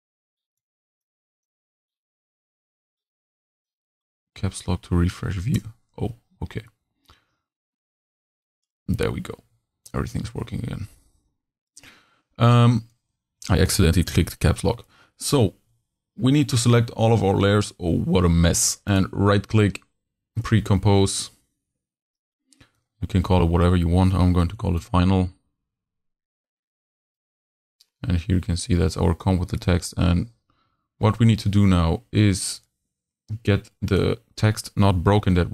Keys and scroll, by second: 9.5 v, 15.6 super+a, 24.5 shift+f, 24.6 shift+i, 35.2 super+c.